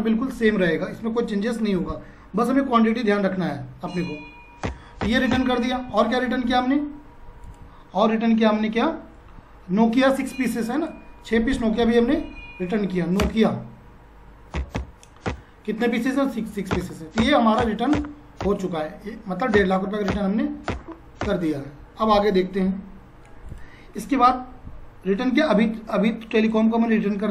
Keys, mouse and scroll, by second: 3.6 F4, 4.6 Return, 7.5 click, 10.7 click, 14.3-15.2 typing, 15.3 Return, 16.4 6, 16.7 Return, 23.5 click, 26.5 click.